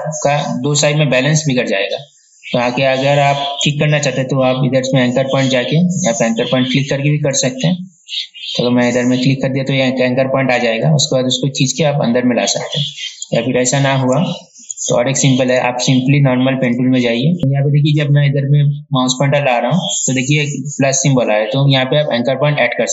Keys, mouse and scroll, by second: 3.9 right click, 5.0 click, 7.5 right click, 9.2 click, 11.3-13.4 drag, 13.9 ctrl+z, 14.5 ctrl+z, 15.7 right click, 16.9 click, 17.4 ctrl+z, 21.9 click.